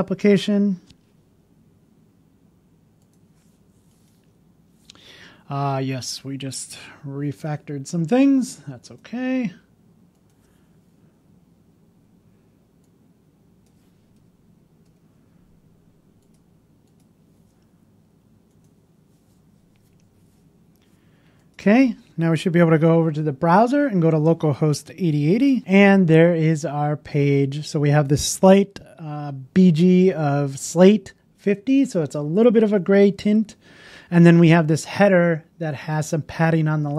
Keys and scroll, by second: 14.2 BackSpace, 25.4 alt+space.